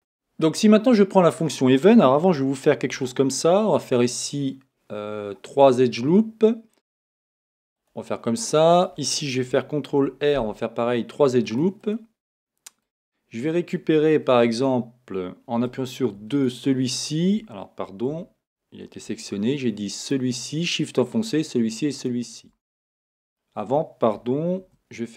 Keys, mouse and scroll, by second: 2.9 ctrl+r, 7.9 click, 11.6 ctrl+r, 12.4 click, 15.7 click, 18.1 a, 20.0 shift+click, 20.9 shift+click, 21.9 shift+click, 22.8-25.1 middle drag, 24.6 ctrl+r.